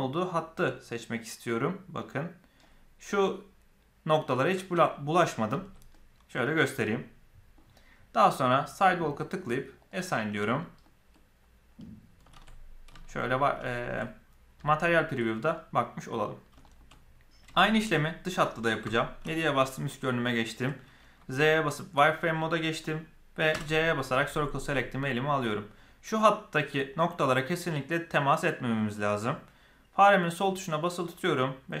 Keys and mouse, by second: 5.5 z, 5.9 middle click, 6.8 middle click, 10.7 middle click, 12.4 alt+a, 13.6 shift+middle click, 14.0-16.2 middle drag, 16.5 shift+middle click, 16.8 middle click, 17.4 shift+middle click, 18.8 KP_7, 19.4-20.6 shift+middle drag, 21.1 z, 23.4 c.